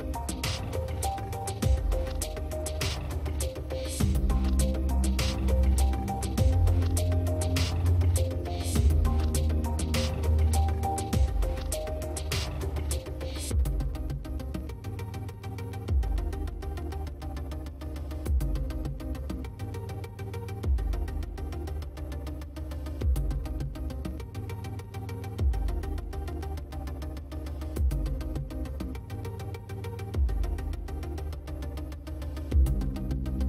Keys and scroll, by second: 8.7 space, 10.3 space, 12.6 space, 14.5 space, 25.5 space, 29.9 ctrl+u.